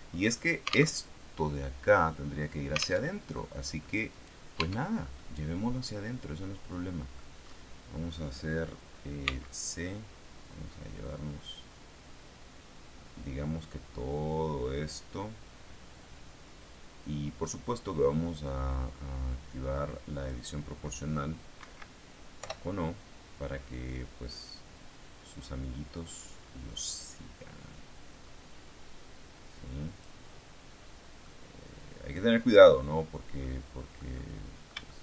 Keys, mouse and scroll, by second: 0.1-0.9 scroll up 2, 0.8 alt+Tab, 3.0 alt+Tab, 3.3 alt+click, 4.0 right click, 4.5 Tab, 5.0-7.2 middle drag, 7.2-8.3 scroll up 1, 9.1 c, 9.7-20.4 drag, 21.5 Escape, 22.3 o, 23.6-30.1 drag, 30.1-31.1 scroll down 1, 31.1 click, 31.3-32.8 middle drag, 32.8-33.1 scroll down 2, 33.3-35.0 middle drag.